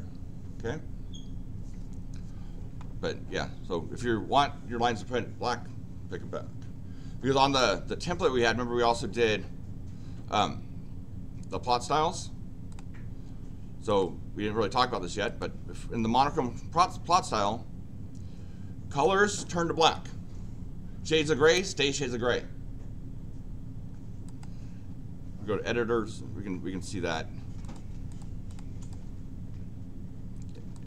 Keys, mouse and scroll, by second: 12.7 click, 13.9 click, 15.3 click, 19.0 click, 24.2 click, 27.6 click, 28.1 click, 28.4 click, 28.8 click, 30.7 click.